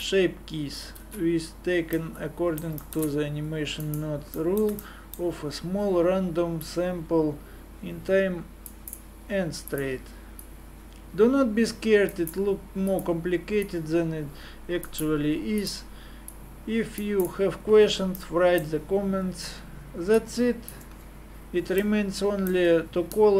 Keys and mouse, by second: 1.2 alt+a, 2.1-3.7 middle drag, 3.8 right click, 6.6-8.8 drag, 9.7-18.2 drag, 20.2 click, 20.4 click, 21.4 click.